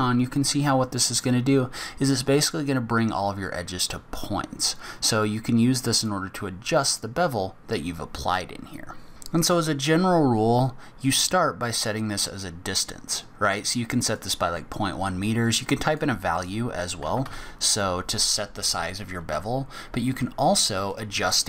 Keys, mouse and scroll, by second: 12.0 click, 15.9 click.